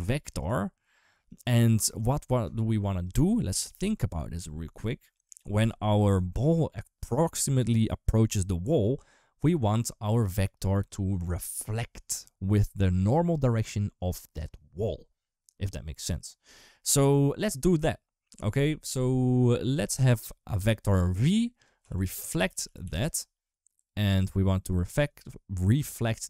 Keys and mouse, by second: 1.2-2.9 drag, 19.9 click, 21.4-23.7 drag, 24.1 click, 24.9 click.